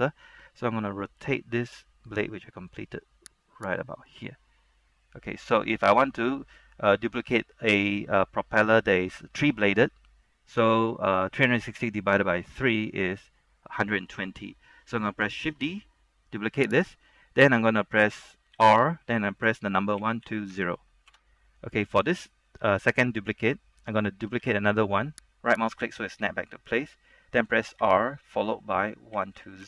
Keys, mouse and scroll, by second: 0.3-1.3 scroll down 1, 1.3 r, 3.8 click, 6.1-15.5 scroll down 1, 15.6 shift+d, 17.0 right click, 18.6 r, 20.1 KP_1, 20.4 KP_2, 20.6 KP_0, 21.2 KP_Enter, 22.0-23.4 scroll down 1, 23.7 scroll up 1, 24.6 shift+d, 25.6-26.7 right drag, 28.0 r, 29.3 KP_1, 29.5 KP_2.